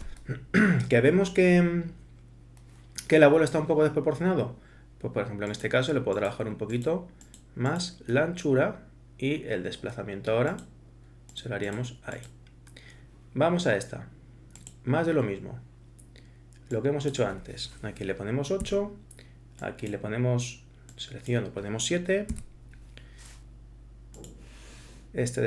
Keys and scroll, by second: 18.6 8, 22.3 7.